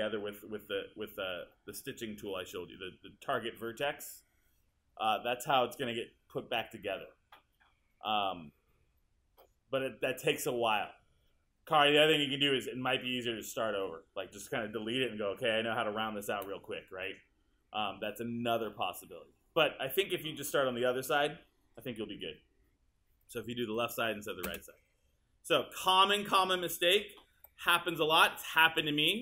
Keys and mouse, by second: 24.5 space, 27.4 1.